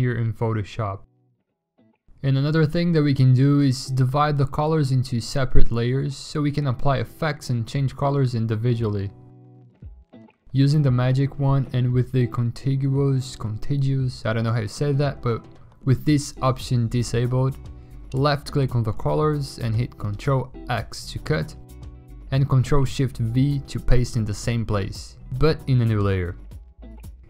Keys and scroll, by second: 2.1 ctrl+j, 4.7 w, 6.4-7.3 typing, 8.0 ctrl+x, 8.7 ctrl+shift+v, 11.7 alt+BackSpace, 14.2 w, 15.8 ctrl+x, 16.8 ctrl+shift+v, 18.1 w, 18.8 ctrl+x, 19.7 ctrl+shift+v, 21.1 w, 22.2 ctrl+x, 22.7 ctrl+shift+v, 23.4 ctrl+z, 24.2 ctrl+alt+z, 24.8 ctrl+d, 25.4-26.3 typing.